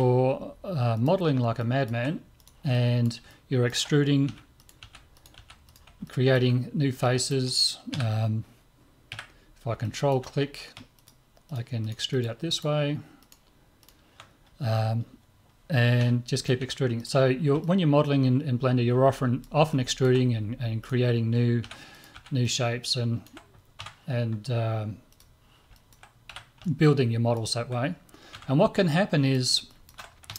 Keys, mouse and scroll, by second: 0.9-3.3 drag, 1.6-3.5 middle drag, 2.4 right click, 3.5 click, 3.7-4.8 middle drag, 4.3 e, 4.8 click, 4.8 e, 5.4 e, 6.1-8.7 middle drag, 7.9 KP_3, 9.1 KP_1, 9.9-12.2 middle drag, 11.0-16.0 drag, 14.7-17.4 middle drag, 16.0 e, 16.6 e, 17.6-22.2 middle drag, 20.8 click, 21.6 e, 22.2 click, 22.2 e, 22.8-24.6 middle drag, 23.8 Tab, 25.2-27.1 drag, 25.7-28.4 middle drag, 26.3 z, 28.4 Tab, 28.9 middle click.